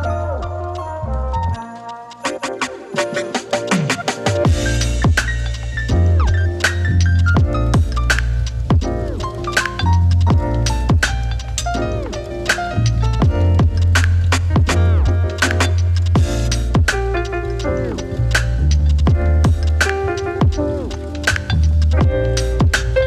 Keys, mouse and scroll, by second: 0.0-0.8 typing, 1.5-6.6 drag, 6.6 middle click, 7.8-9.5 drag, 12.7-16.0 drag, 16.6-18.8 middle drag, 18.8-23.0 drag.